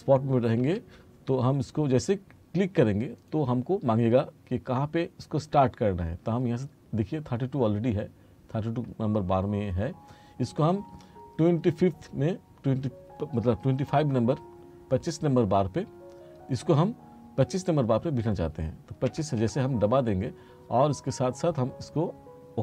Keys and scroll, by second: 0.7 F3, 19.1 2.